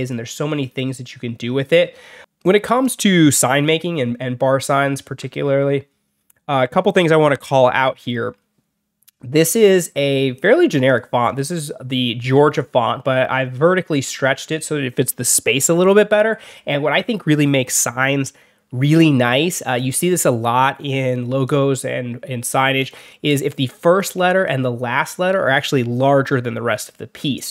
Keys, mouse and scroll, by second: 2.3 click, 10.8 click, 11.2 click, 22.7 click, 22.9 click, 23.9 click.